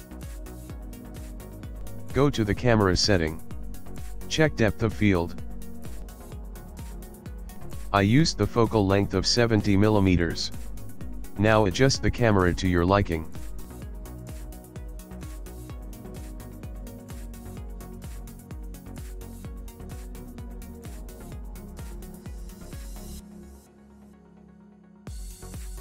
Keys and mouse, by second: 0.5 click, 1.3 middle click, 2.4 click, 4.2 click, 5.3-6.9 click, 6.4 click, 7.5 click, 8.2 click, 8.9 click, 12.0 KP_0, 13.1 ctrl+middle click, 14.3 g, 16.4 g, 18.2 g, 19.5 g, 21.7 g, 25.7 click.